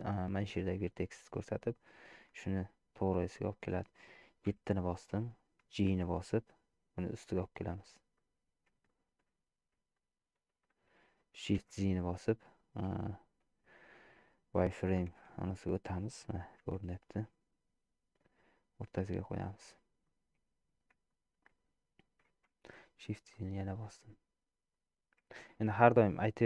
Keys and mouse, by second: 4.5 KP_7, 5.9 g, 8.9 shift+middle click, 10.1 shift+middle click, 11.8 shift+z, 15.1 alt+z, 16.6 g, 20.1 middle click, 21.2 shift+middle click, 22.5 shift+z, 23.3-24.8 middle drag, 25.3 shift+middle click.